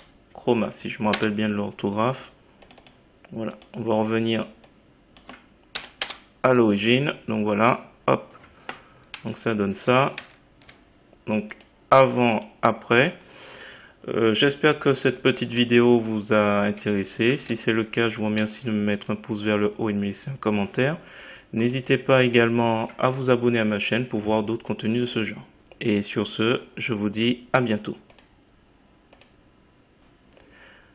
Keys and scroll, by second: 1.1 Return, 5.7 BackSpace, 6.0 Return.